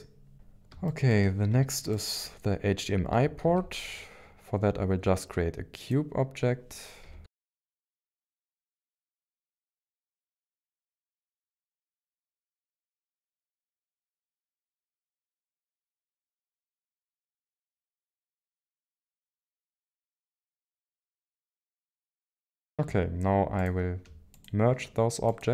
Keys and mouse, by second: 0.3 KP_1, 0.3 KP_3, 0.3 KP_9, 0.8-1.2 shift+middle drag, 1.9 click, 3.4 shift+a, 7.0-12.9 typing, 7.8 ctrl+click, 8.6 ctrl+click, 9.2 click, 10.1 ctrl+click, 10.7 ctrl+click, 11.3 shift+middle click, 12.6 click, 13.9 shift+middle click, 15.1 shift+d, 15.4 x, 16.3 ctrl+click, 16.4 shift+middle click, 17.0-18.3 typing, 17.4 ctrl+click, 18.1 ctrl+shift+click, 19.3 middle click, 19.9 click, 20.3 g, 20.3 x, 20.5 y, 21.3-22.7 middle drag, 24.4 shift+click.